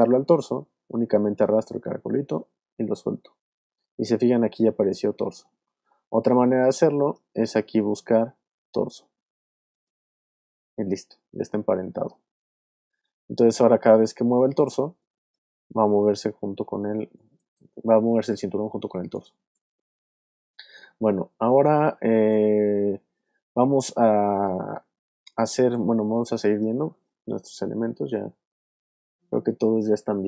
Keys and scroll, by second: 6.3 super+z, 14.2 v, 15.8 super+z, 17.1 space, 18.7 space, 21.7 alt+space, 25.1 alt+space, 25.8 space, 27.3 super+Up, 29.5 super+Down.